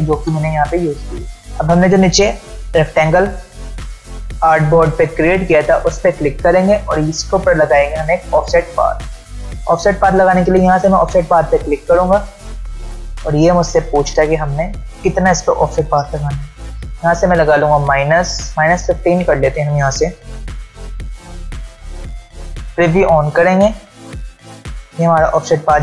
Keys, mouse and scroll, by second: 1.2 space, 1.9-2.6 click, 2.3 space, 5.7 click, 9.0-9.4 ctrl+alt+scroll down 1, 10.4 ctrl+alt+scroll up 1, 22.2 ctrl+alt+Num_Lock, 22.2-23.5 ctrl+alt+scroll down 2, 23.5 scroll down 1, 23.7 click.